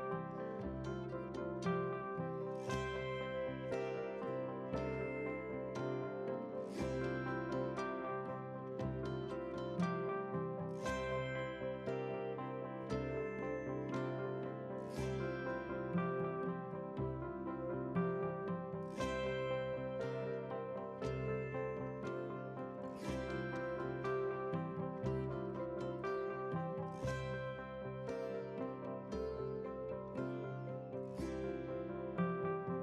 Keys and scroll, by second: 6.1 F11.